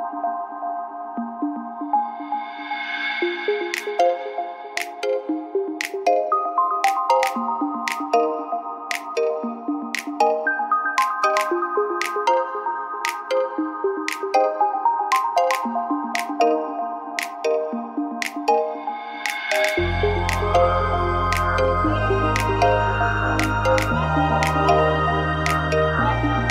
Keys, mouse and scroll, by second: 0.0 right click, 1.0 right click, 1.8 f, 2.9-4.7 right drag, 2.9 a, 4.7 f, 4.7 a, 9.4 KP_3, 11.6 ctrl+r, 13.9 right click, 14.0 ctrl+z, 14.8 ctrl+r, 15.5 click, 16.0 ctrl+KP_3, 16.7 ctrl+r, 18.2 right click, 18.7 KP_3, 20.2 g, 22.2 a, 22.7 middle click, 23.1 middle click, 23.2 middle click, 23.6 /, 23.7-25.7 middle drag.